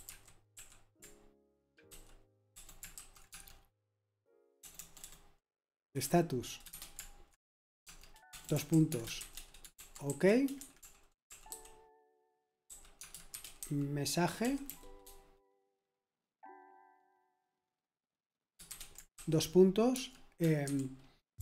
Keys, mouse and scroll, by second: 0.0-15.1 typing, 18.7-21.4 typing.